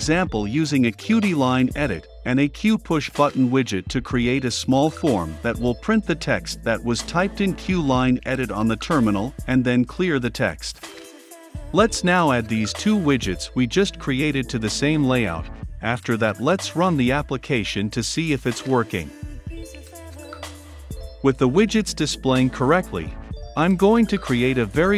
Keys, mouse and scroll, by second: 2.5-3.3 typing, 3.8 click, 4.3 ctrl+c, 4.5 Right, 4.9 Return, 5.0 ctrl+v, 5.2 click, 5.7-9.1 typing, 6.3 click, 7.9 Return, 8.4 click, 9.7 click, 10.6 l, 10.9 n, 11.5 Return, 12.3 click, 13.5 ctrl+c, 13.7 Right, 13.9 Return, 14.0 ctrl+v, 14.3 click, 15.1 b, 15.3 Return, 15.6 ctrl+F5, 16.8-18.3 drag, 18.3-19.5 typing, 20.1-22.1 drag, 22.1-23.1 middle drag, 23.1 Return, 23.3 ctrl+z, 23.5 click, 23.6 Return, 23.6 s, 23.9 Return, 24.4 >, 24.7 b.